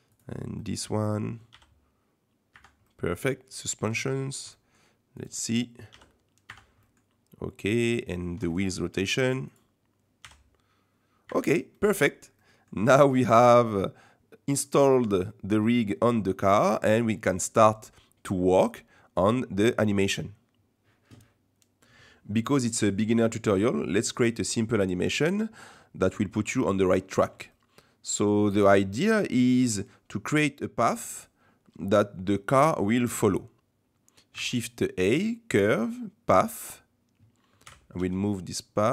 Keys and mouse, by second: 0.2 click, 0.5 middle click, 1.5 g, 2.9 middle click, 3.8 shift+middle click, 4.5 middle click, 5.9 g, 6.8 middle click, 7.7 click, 8.5 ctrl+shift+click, 10.2 g, 11.7 middle drag, 12.4 middle click, 13.3-14.7 middle drag, 14.9-15.5 middle drag, 16.2-16.7 middle drag, 18.7-19.3 middle drag, 24.4 middle click, 27.6-28.2 shift+middle drag, 28.4-28.8 middle drag, 29.0-29.4 shift+middle drag, 34.3 shift+a, 37.7 g.